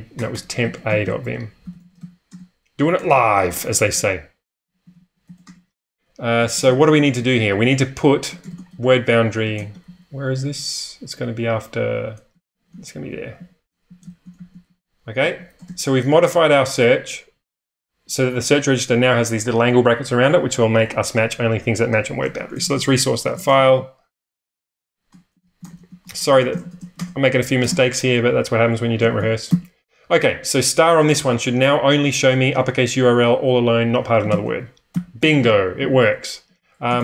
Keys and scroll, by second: 0.0-2.4 typing, 6.3-9.8 typing, 11.1-15.3 typing, 15.2 ctrl+[, 15.6 ctrl+[, 22.3-24.5 typing, 27.0 typing, 28.9-29.6 typing, 34.3-37.0 typing.